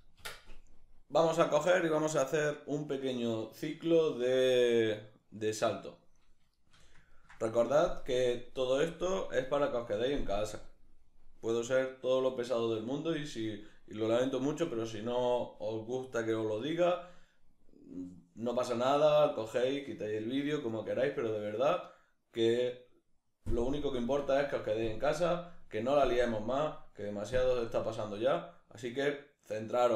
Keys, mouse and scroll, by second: 6.6-29.9 shift+middle drag.